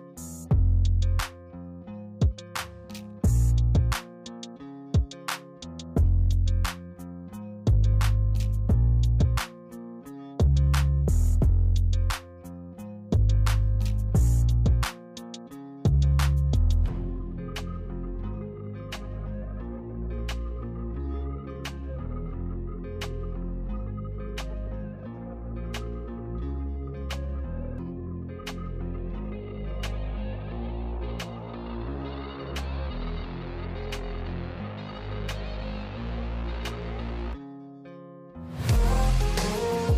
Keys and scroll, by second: 10.2 ctrl+t, 12.0 ctrl+t, 12.9 ctrl+KP_Subtract, 13.1 ctrl+KP_Subtract, 28.3-28.7 typing.